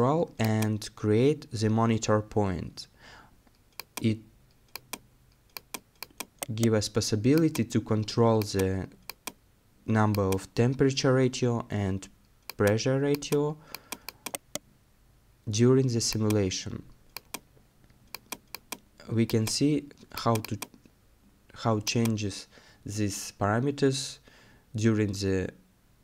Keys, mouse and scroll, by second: 6.4 right click, 14.3 right click, 25.1-25.5 scroll down 1, 25.5 middle click.